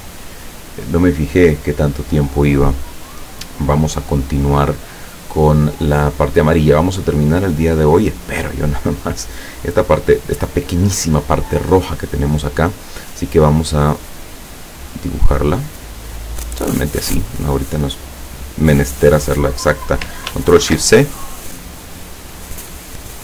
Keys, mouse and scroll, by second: 7.9 click, 14.0-17.1 drag, 20.6 ctrl+shift+c, 21.9 click.